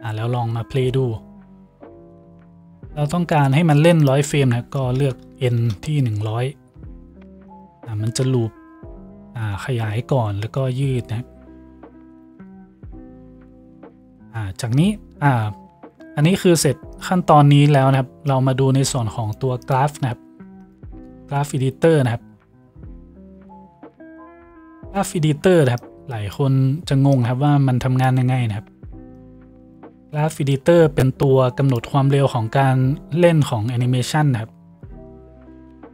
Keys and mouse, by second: 5.2 KP_0.